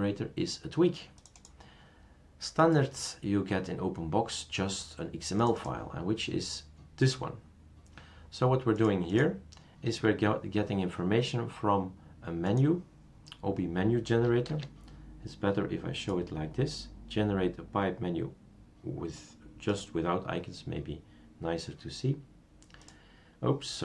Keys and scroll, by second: 14.5 super+space.